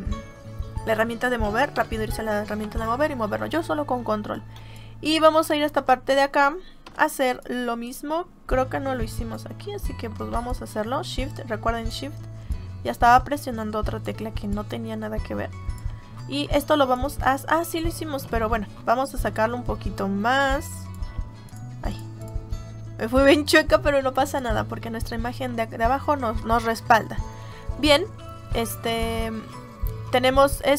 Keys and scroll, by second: 1.6 v, 4.5 space, 6.7 m.